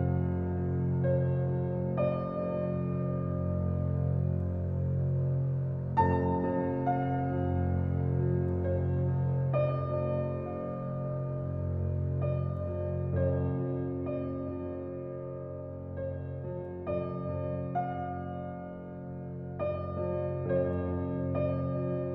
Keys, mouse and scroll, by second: 0.2 ctrl+b, 2.7 Tab, 3.0-3.8 middle drag, 3.8 alt+z, 4.3-6.0 shift+middle drag, 6.0-6.4 scroll down 3, 6.7 ctrl+z, 6.9 ctrl+z, 7.9 Tab, 8.7 shift+d, 9.7 click, 9.9 Tab, 10.6 ctrl+b, 12.2 Tab, 12.5 click, 13.0 s, 16.0 g, 18.0 scroll up 3, 18.2-19.0 middle drag, 19.2 alt+middle click, 19.5 scroll up 1, 19.7-21.0 shift+middle drag, 21.0 g.